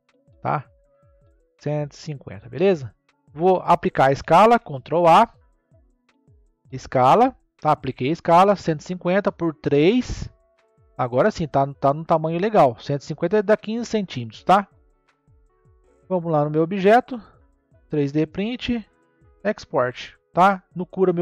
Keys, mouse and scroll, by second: 2.5-4.8 scroll down 10, 4.8 ctrl+a, 10.1-10.9 scroll up 1, 10.9-12.3 shift+middle drag, 12.3 scroll down 2, 15.7 n, 17.7 click, 19.2-21.2 drag.